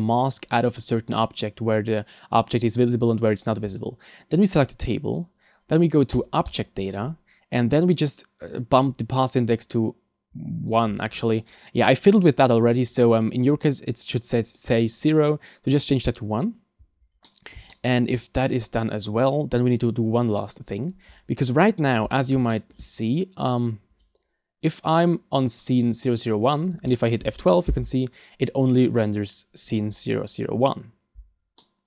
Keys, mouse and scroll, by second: 3.7 right click, 6.1 click, 6.5 click, 7.3-8.1 scroll down 1, 8.1 scroll down 1, 10.7 click, 11.5 click, 17.3 middle click, 17.7 shift+middle click, 18.1 middle click, 21.4 middle click, 22.5 shift+middle click, 23.4 click, 25.8 click, 26.9 shift+middle click.